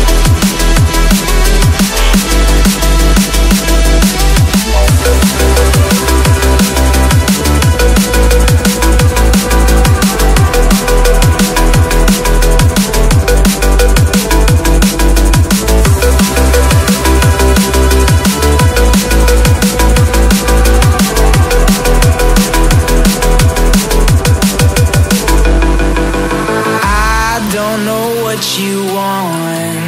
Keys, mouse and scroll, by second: 2.4 double click, 2.6-2.9 scroll up 1, 3.0 shift+click, 3.4 ctrl+g, 4.0 ctrl+click, 4.4 ctrl+g, 5.3 ctrl+click, 5.6 double click, 5.8 ctrl+click, 6.2 ctrl+g, 6.6 right click, 7.5 double click, 8.9 alt+scroll down 1, 10.3 shift+click, 14.1 double click, 17.5 alt+scroll up 1, 18.0 alt+scroll down 1, 20.6 double click, 25.0 shift+click, 29.0 double click.